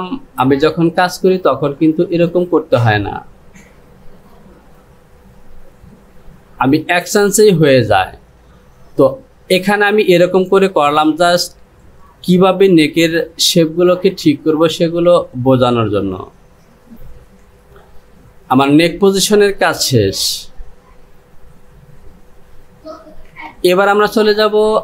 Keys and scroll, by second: 18.7 Home, 23.5 Return.